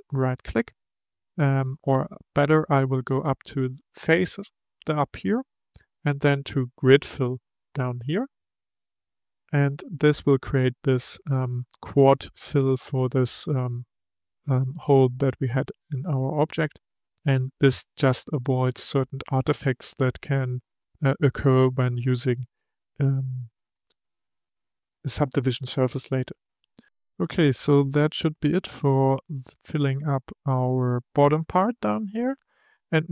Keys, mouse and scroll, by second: 0.1-3.6 right drag, 3.6-6.8 drag, 26.8-29.0 middle drag.